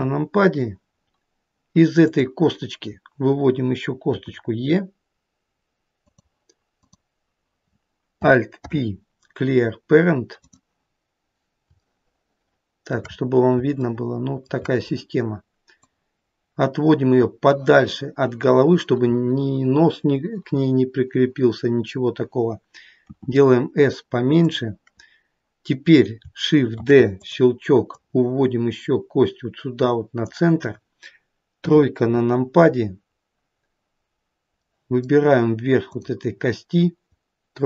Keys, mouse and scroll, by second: 1.4-1.7 scroll down 1, 2.2 click, 4.3 e, 6.9 click, 8.8 alt+p, 12.0 shift+middle click, 13.2-14.0 scroll up 4, 14.0 shift+middle click, 16.0 click, 23.2 s, 26.9 shift+d, 28.1 click, 31.8 KP_3, 32.9-33.3 scroll down 2, 34.8 middle click, 34.8-36.0 scroll down 1, 36.0 click.